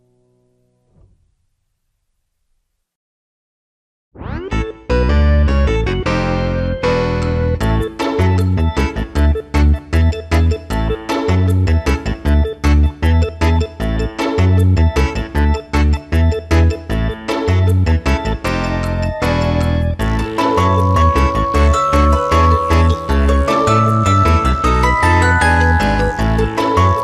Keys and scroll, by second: 6.8 [, 8.8 ctrl+space, 9.8 s, 9.9 ctrl+space, 10.6 space, 14.9 space, 16.2 space, 17.3 space, 19.8 space, 25.7 ctrl+KP_Subtract, 26.6 ctrl+y.